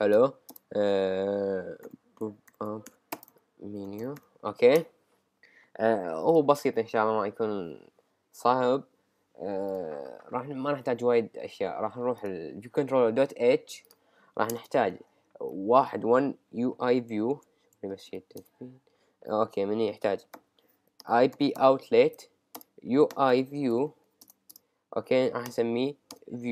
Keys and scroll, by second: 2.5-4.2 typing, 4.7 Return, 14.5 Return, 15.4 Up, 17.9 shift+{, 18.4 Return, 21.0 shift+BackSpace, 21.3 shift+i, 21.6 shift+b, 22.2 Return.